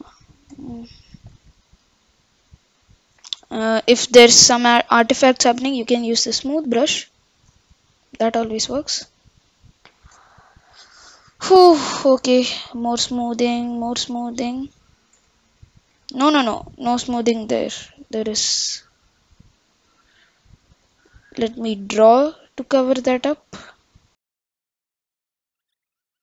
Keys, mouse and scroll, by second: 1.3-2.7 middle drag, 5.9-9.2 drag, 9.6-11.5 scroll up 4, 11.5-15.3 drag, 15.3-16.7 middle drag, 18.9 click, 20.9-24.3 drag, 24.5 click, 25.5 Left, 25.5 click, 25.7-26.2 scroll down 1.